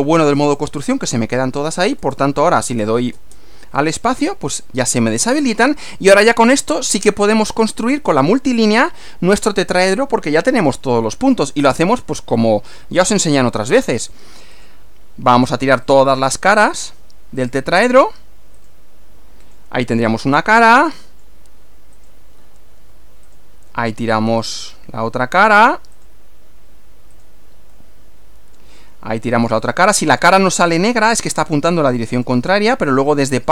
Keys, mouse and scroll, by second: 0.3 click, 1.7 click, 2.0 space, 5.2-8.1 middle drag, 8.3 scroll up 2, 11.7 click, 14.6 click, 15.9 click, 17.4 click, 18.5 click, 19.5 click, 19.9-21.4 middle drag, 21.9 click, 23.3 click, 24.4 click, 25.9 click, 27.1 click, 27.7-28.7 middle drag, 29.3 click, 30.7 click, 32.1 click, 33.3 click.